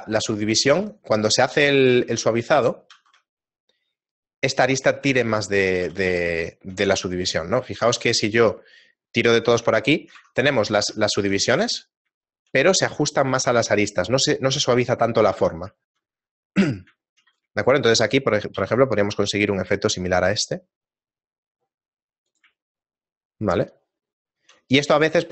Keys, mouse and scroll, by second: 0.1 shift+middle click, 2.2 shift+middle click, 3.0 shift+e, 5.2 shift+middle click, 6.0 a, 6.4 a, 6.9 middle click, 7.3-8.0 scroll down 2, 8.2 shift+e, 9.8 middle click, 10.3 Tab, 10.6 z, 11.2 shift+middle click, 12.4 shift+middle click, 15.4 Tab, 15.8 shift+middle click, 16.9 right click, 17.1 shift+middle click, 17.6 shift+middle click, 17.6 z, 18.6 shift+e, 22.6 shift+middle click, 24.9 scroll up 2.